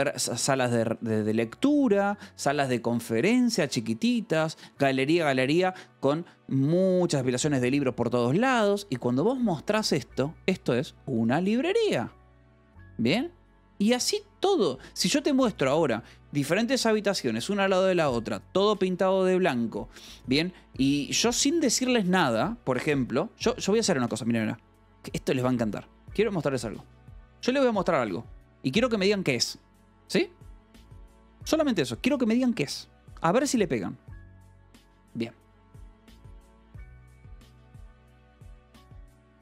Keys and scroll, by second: 27.8 ctrl+t, 36.2-37.5 typing.